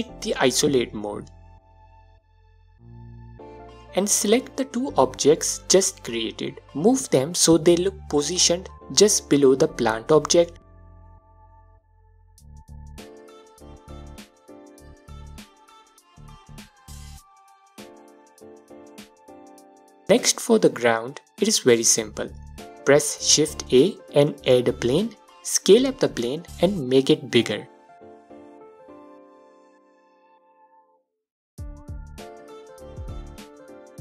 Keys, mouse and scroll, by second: 0.4 KP_Divide, 3.7 shift+click, 5.3-13.6 drag, 9.1 scroll down 1, 9.6 a, 14.0 scroll up 1, 14.4-15.1 alt+drag, 15.1-16.0 middle drag, 15.4-16.0 scroll up 2, 16.0-19.1 alt+drag, 19.1-21.9 middle drag, 21.9 shift+a, 22.8 s, 24.3 right click, 24.9 click, 25.6 right click, 26.1 middle click, 26.4 click, 27.1-27.9 scroll down 2, 27.9-28.6 middle drag, 28.6-31.6 alt+drag, 30.2 s, 32.3 scroll up 2, 33.5 scroll up 1, 33.5 alt+click.